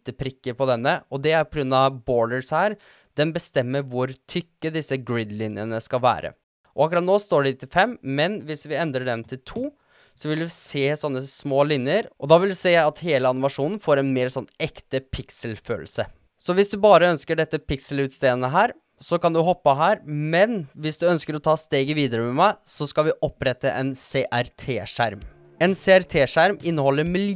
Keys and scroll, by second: 8.2 2, 8.5 Return.